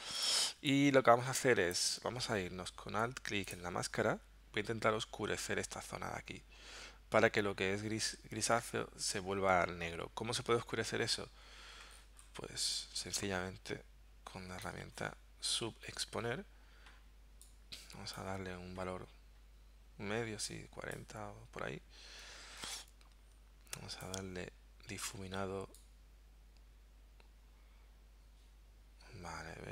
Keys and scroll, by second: 0.5 space.